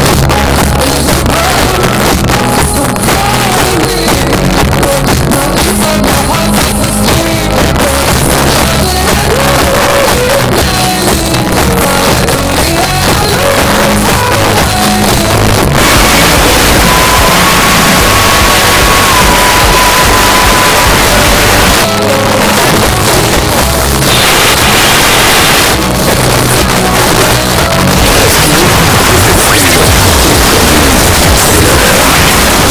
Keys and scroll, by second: 0.0 Down, 0.2 Down, 0.3 Down, 0.7 Down, 0.9 Return, 0.9 typing, 21.7 Page_Down.